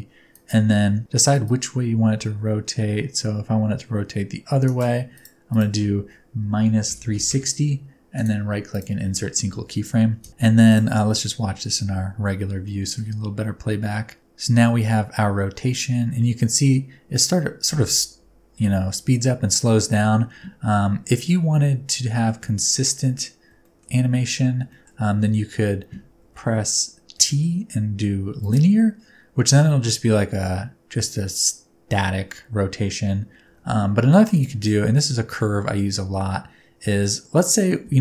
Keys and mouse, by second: 0.3 click, 1.5-4.7 drag, 5.1-8.8 drag, 8.1 middle click, 8.1 right click, 10.2 space, 10.8 click, 12.7-13.0 shift+middle drag, 22.2 middle click, 22.4 a, 23.6 shift+middle click, 24.7 shift+middle click, 26.2 a, 27.2 t, 33.5 t, 36.8 space, 37.9 space.